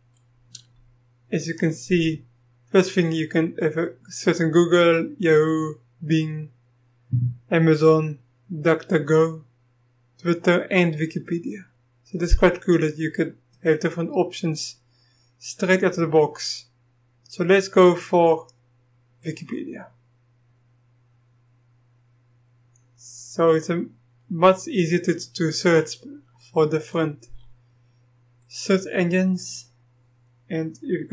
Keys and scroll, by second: 31.0-31.1 typing.